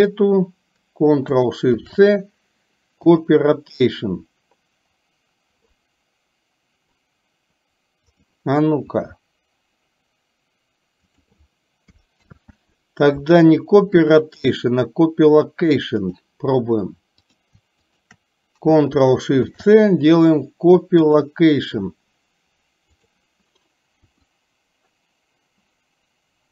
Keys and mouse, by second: 1.8 ctrl+shift+c, 9.0 r, 12.3 ctrl+z, 12.4 click, 16.0 click, 17.3 click, 17.9 shift+click, 19.4 ctrl+shift+c, 23.0 click, 24.2 r.